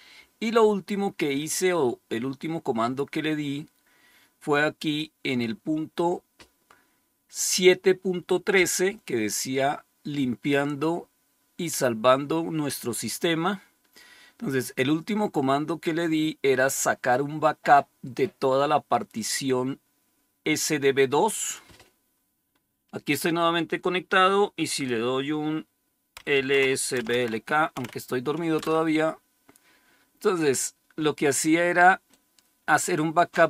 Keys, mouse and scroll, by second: 0.4-4.3 scroll down 4, 4.8 click, 13.4-15.8 scroll down 1, 15.8-20.9 scroll down 1, 21.3-25.9 drag, 25.8-28.5 typing, 32.0-33.4 drag.